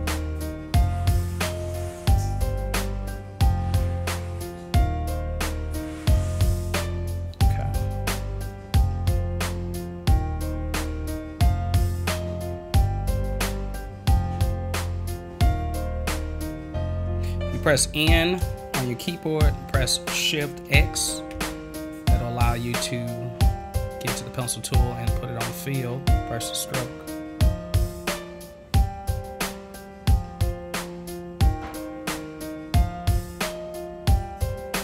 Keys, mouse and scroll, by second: 2.8-6.7 drag, 9.0-13.5 drag, 21.3 shift+x, 25.9-34.8 drag.